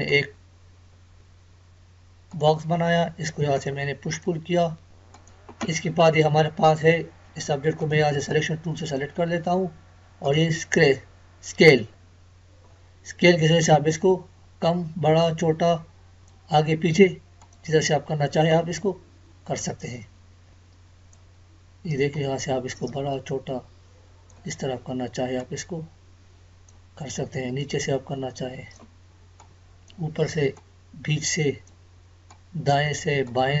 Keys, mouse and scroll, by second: 7.8-10.2 drag, 13.6-33.6 drag.